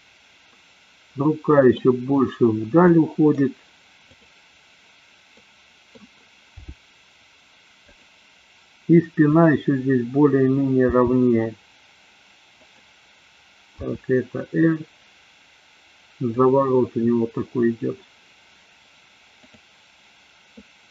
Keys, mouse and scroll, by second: 0.0-1.9 middle drag, 2.9 middle click, 4.2-4.8 drag, 5.3 middle click, 6.8 g, 9.2 click, 10.9 g, 13.8 r.